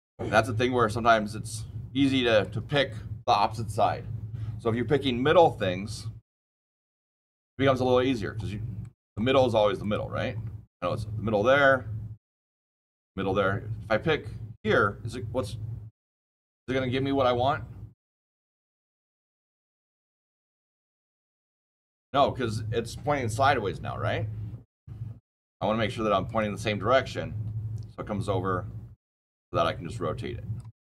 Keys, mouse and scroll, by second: 5.2 ctrl+z, 6.5 click, 6.8 scroll up 6, 7.1 scroll down 1, 7.5-8.0 scroll down 7, 8.0-8.7 scroll, 8.7 click, 9.7 click, 10.2 scroll, 10.6 scroll up 7, 10.6 scroll, 11.0 scroll up 8, 11.2-11.8 scroll down 9, 11.8-13.4 scroll up 2, 26.2 click, 28.9 click.